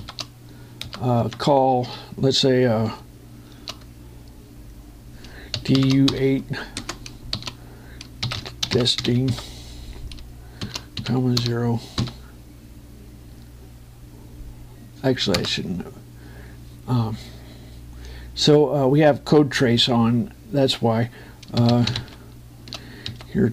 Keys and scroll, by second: 1.6 Return, 6.3 shift+j, 7.5 space, 9.2 e, 11.9-12.7 typing, 16.1 Return, 22.3 shift+".